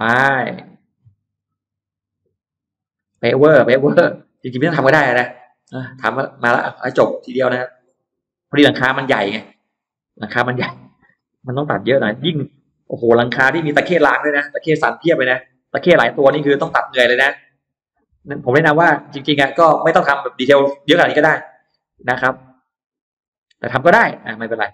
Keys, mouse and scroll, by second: 0.4 click, 0.9-1.6 scroll up 4, 1.9 click, 2.6 click, 2.9-4.2 scroll down 6, 3.4 middle click, 3.9 middle click, 4.4-5.1 scroll up 4, 5.2 middle click, 7.1 click, 8.1 click, 8.6 click, 9.2-9.5 scroll up 1, 9.7 scroll down 1, 10.2 scroll up 1, 10.6 click, 11.2 click, 12.1-12.4 scroll up 1, 12.4 middle click, 12.8 scroll up 1, 12.9 middle click, 13.4 click, 14.0 click, 14.2 middle click, 15.2 click, 15.8 click, 16.0 middle click, 17.0 click, 17.6 click, 18.4 click, 18.9 click, 19.2 scroll down 1, 19.7-20.7 scroll up 3, 20.7 click, 21.5 click, 22.3 click, 22.8 click, 23.0-23.4 scroll down 2, 23.6-24.0 scroll up 2, 24.1 click.